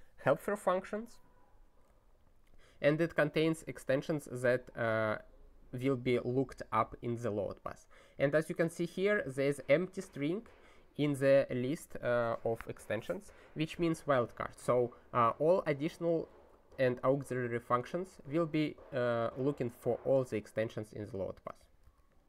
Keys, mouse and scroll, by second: 21.6 ctrl+n, 21.8 Return.